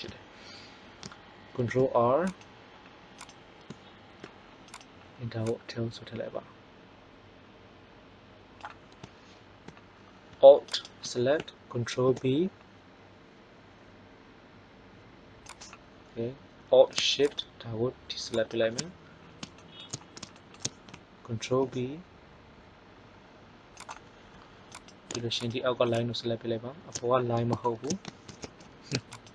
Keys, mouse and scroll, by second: 1.4 ctrl+r, 10.7 right click, 11.8 ctrl+b, 21.4 ctrl+b, 27.2 middle click, 28.2 ctrl+z, 29.1 right click.